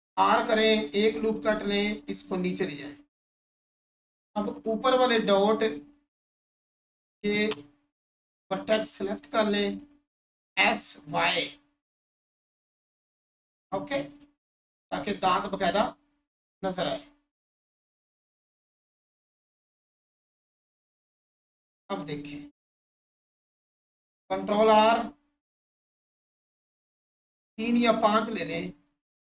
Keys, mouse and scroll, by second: 0.7-13.9 drag, 14.6 1, 17.4 click, 21.7-23.0 scroll down 1, 23.0 click, 25.2-25.8 scroll up 1, 26.3-27.3 scroll up 1, 27.3 click, 28.5 Tab.